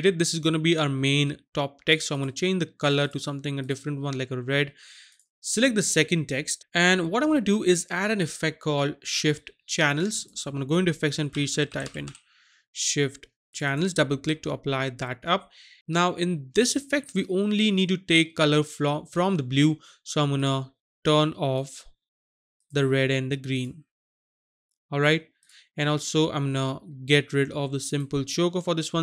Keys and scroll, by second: 11.4-12.0 typing.